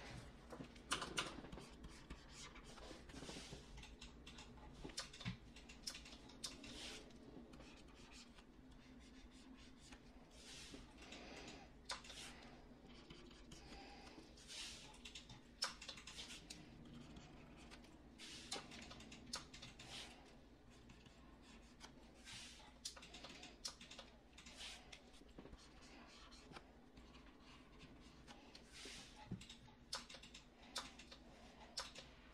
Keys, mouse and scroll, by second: 0.8 [, 1.1 [.